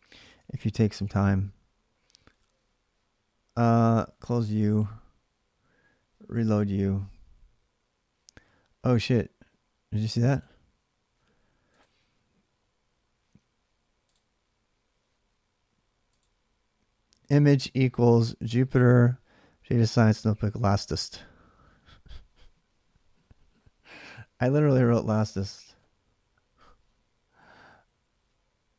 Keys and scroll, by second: 0.0 alt+Tab, 26.1-27.4 Right, 27.4 Left, 27.6 Left, 28.6 Left, 28.6 BackSpace.